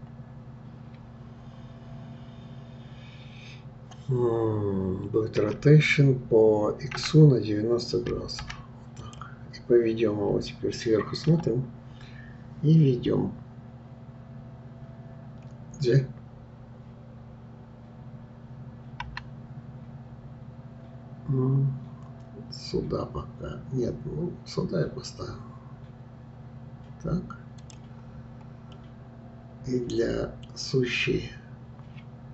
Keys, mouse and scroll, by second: 5.4 r, 11.3 KP_7, 28.2-28.8 scroll up 2, 28.8-31.7 middle drag.